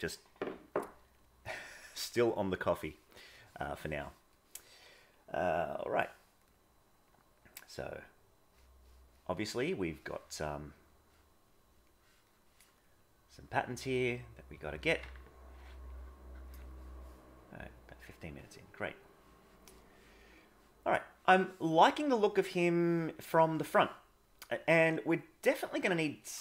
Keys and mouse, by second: 3.0 middle click, 3.6 middle click, 4.4 middle click, 5.7 middle click, 7.1 click, 11.9 middle click, 13.0 click, 13.7 click, 14.2 click, 17.6 click, 18.0 click, 19.8 middle click, 21.4-23.7 middle drag, 25.0 middle click.